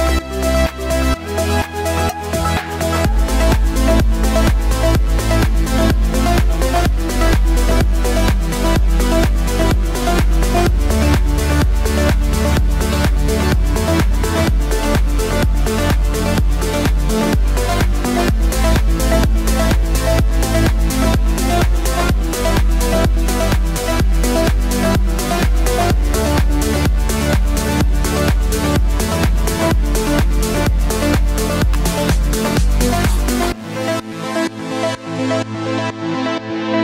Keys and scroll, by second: 29.1 v.